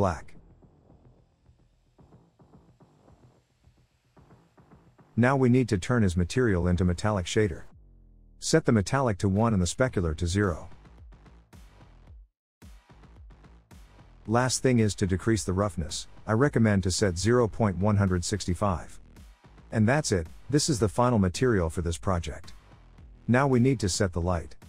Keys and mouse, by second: 0.8 click, 8.4 middle click, 9.8 click, 11.4-13.1 drag, 13.9-15.8 drag, 16.0-19.1 drag, 20.4-23.5 drag, 24.2 middle click.